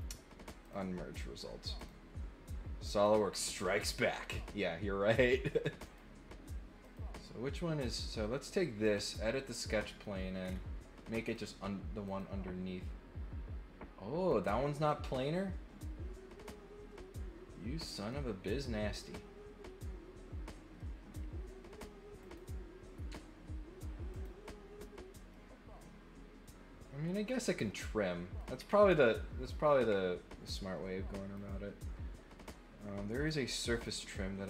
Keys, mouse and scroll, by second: 0.6 click, 1.7 click, 3.0 click, 3.4 middle click, 5.1 click, 5.8 click, 6.8 click, 7.8 right click, 8.8 click, 9.6 middle click, 10.4 scroll up 1, 11.3 click, 12.0 click, 14.2 click, 14.8-18.1 middle drag, 20.8 middle click, 22.2 click, 24.1 click, 25.2-28.3 middle drag, 28.5-28.9 scroll down 3, 31.3 click, 33.1 click, 33.7 click, 34.3 middle click.